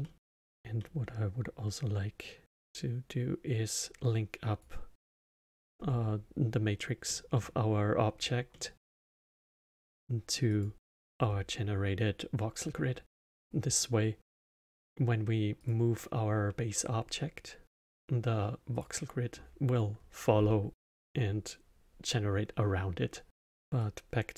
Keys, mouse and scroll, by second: 0.0 middle click, 0.3 scroll down 2, 0.7-2.5 middle drag, 2.5 click, 5.6-6.4 scroll up 5, 7.0-10.5 middle drag, 10.5 click, 11.2 scroll up 2, 15.5 click, 18.7 click, 23.4-23.8 middle drag, 23.8 click.